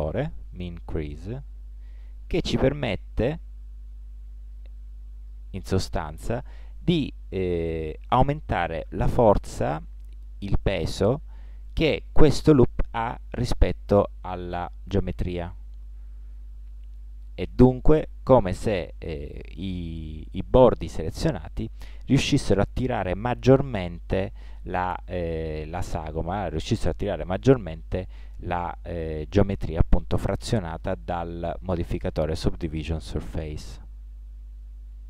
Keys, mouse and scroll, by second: 0.5-2.4 drag, 6.6 click, 14.6-15.9 middle drag.